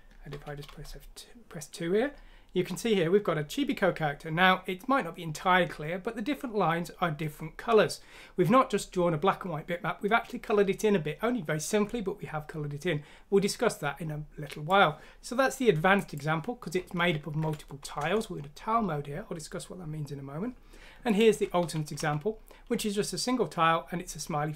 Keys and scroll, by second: 0.3-0.7 typing, 17.4 F6, 18.0 Return, 21.6-22.0 typing.